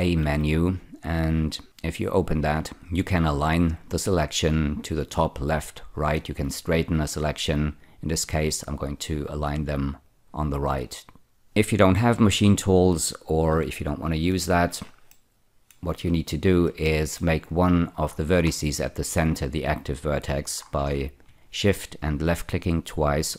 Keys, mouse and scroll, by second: 0.2 a, 10.0 click, 14.3 ctrl+z, 15.0 middle click, 16.1-16.6 scroll up 1, 16.8 shift+middle click, 18.0-20.2 scroll up 4, 20.5-21.2 scroll up 7, 22.3 shift+click, 22.8 shift+click.